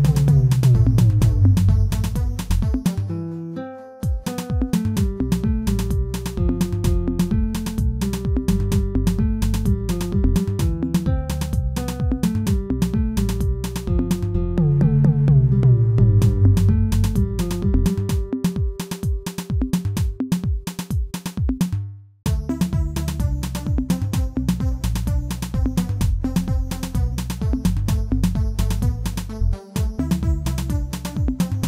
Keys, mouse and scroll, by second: 0.0-0.3 scroll down 2, 0.3-0.8 shift+middle drag, 1.2-4.8 middle drag, 4.8 Tab, 5.4 alt+click, 6.3 alt+click, 7.2 alt+click, 7.7 alt+click, 8.5 scroll up 1, 8.8 shift+middle click, 9.6 e, 11.3 scroll up 2, 11.6 shift+middle click, 12.1-13.1 scroll up 2, 13.1 e, 15.3 ctrl+z, 16.3 g, 18.5 e, 18.9 g, 25.9 scroll down 1, 26.2 KP_1, 27.2 shift+z, 27.3 shift+middle click, 27.7-28.1 scroll up 1, 28.1-29.2 shift+middle drag, 29.2 g.